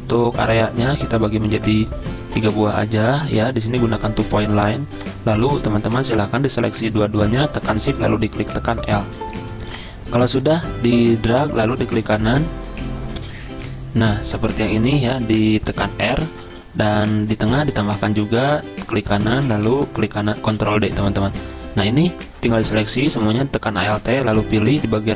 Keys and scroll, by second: 12.5 i, 14.8 F10, 15.8 r, 20.6 ctrl+d.